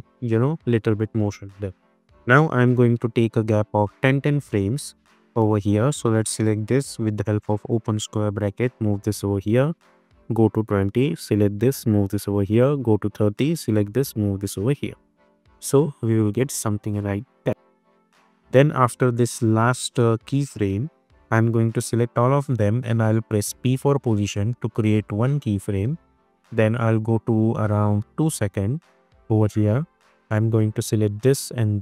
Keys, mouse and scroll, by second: 0.9-1.2 click, 2.6 =, 3.7 click, 8.3 [, 10.0 click, 11.7 [, 12.6 click, 13.9 [, 14.6-15.2 click, 15.1 space, 17.3 -, 18.3-19.2 drag, 23.2 p, 24.9-28.8 drag.